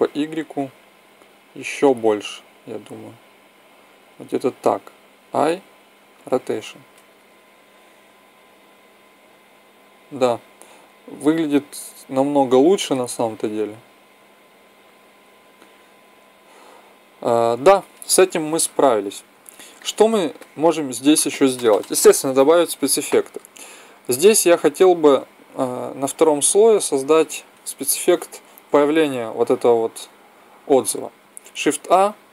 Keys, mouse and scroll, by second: 4.1-6.0 drag, 5.1 i, 7.1-8.9 drag, 25.7-27.5 drag, 31.3 shift+a.